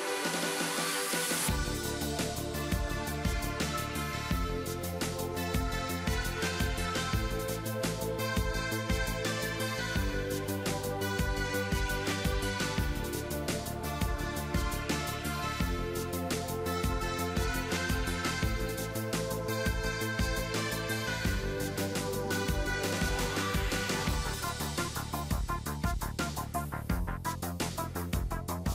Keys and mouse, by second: 0.7-2.6 drag, 0.9 a, 4.1 b, 5.4 a, 5.8 b, 6.6 ctrl+z, 6.9 ctrl+z, 7.1 ctrl+z, 7.3 ctrl+z, 7.7 ctrl+z, 7.9 ctrl+z, 8.1 ctrl+z, 8.5 ctrl+z, 8.9 a, 9.4 ctrl+r, 10.2 a, 10.6 b, 11.3 x, 12.5 ctrl+s, 13.4 z, 13.6-14.9 drag, 15.0 KP_3, 16.3 b, 18.1 g, 19.1 x, 23.6 KP_1, 26.3 e, 28.1 e.